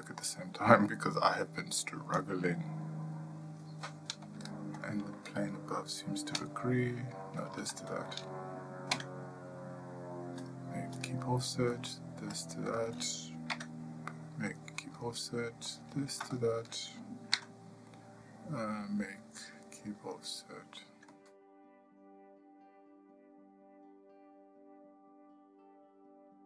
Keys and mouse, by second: 0.5 middle click, 1.2 shift+middle click, 5.3 shift+click, 7.9 click, 16.7 typing, 16.8 shift+click, 17.8 typing, 20.6 click, 21.4 middle click, 21.5 shift+middle click, 21.8-24.3 typing, 22.8 click, 23.3 shift+click, 24.2 click, 24.6 shift+middle click, 24.8 shift+middle click, 25.0 click, 25.4 click.